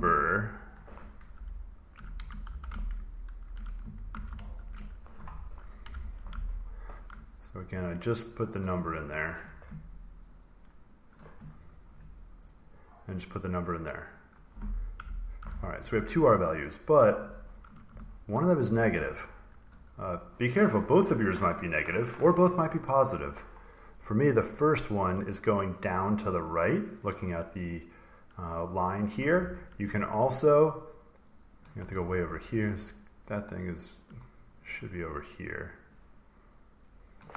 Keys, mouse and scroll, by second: 0.3 click, 1.3-4.9 typing, 4.0 ctrl+v, 5.7 Return, 6.0 typing, 6.4 ctrl+scroll, 7.6 click, 8.2 click, 8.3 click, 11.0 click, 12.4 click, 12.6 click, 14.0 click, 14.9-15.3 typing, 16.2 click, 17.1 click, 18.0-19.1 ctrl+scroll up 2, 19.1 scroll up 1, 31.4 click, 32.4 click, 34.5 click, 37.0 click.